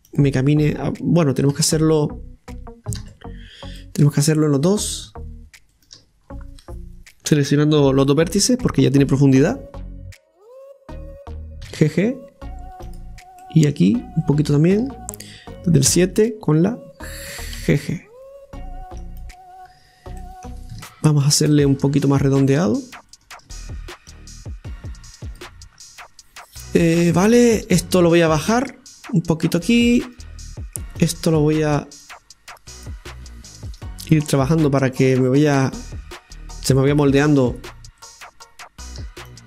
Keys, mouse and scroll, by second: 1.5 shift+a, 3.0 ctrl+z, 3.8-5.7 middle drag, 5.7-8.7 shift+right drag, 10.1 KP_7, 11.6 g, 13.4 middle click, 14.2 right click, 15.9 KP_7, 17.6 g, 20.2-21.3 middle drag, 21.7-23.1 middle drag, 23.3 shift+right click, 25.4-26.5 drag, 26.5-26.9 scroll down 2, 28.5 click, 30.0 right click, 31.0 click, 32.1-33.7 drag, 33.7 right click, 34.4 click, 36.1-37.6 drag, 37.6-39.3 shift+right drag, 39.3-39.4 drag.